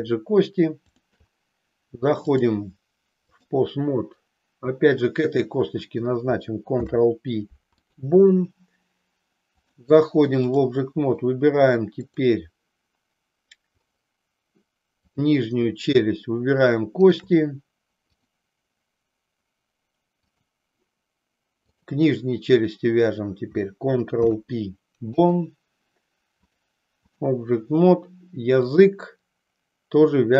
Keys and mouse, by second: 0.8 shift+click, 2.4-3.5 drag, 6.7 ctrl+p, 9.5-10.7 drag, 15.0 click, 18.2-20.6 drag, 21.8-22.9 drag, 24.0 ctrl+p, 26.5 click, 28.7 click.